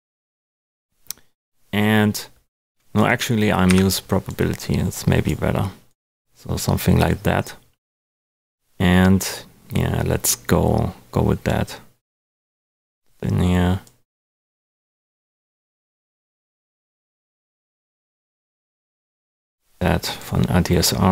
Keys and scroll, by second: 3.6 Delete.